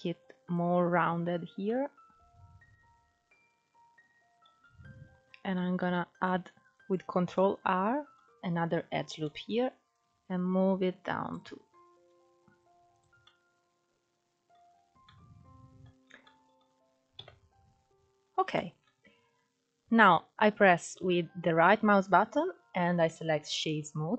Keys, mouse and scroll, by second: 1.4-5.2 middle drag, 5.2 ctrl+r, 7.0-9.6 middle drag, 9.6 click, 11.5 s, 12.8 scroll down 1, 12.9-14.3 middle drag, 14.3 Tab, 14.7-15.7 middle drag, 15.7 scroll down 4, 15.9-16.8 middle drag, 16.8 KP_1, 17.4-18.2 scroll up 4, 18.2-18.6 shift+middle drag, 18.6-19.5 scroll up 1, 19.5-20.1 scroll up 2, 20.1 scroll up 1, 20.1-20.5 scroll down 2, 21.9-24.1 right drag.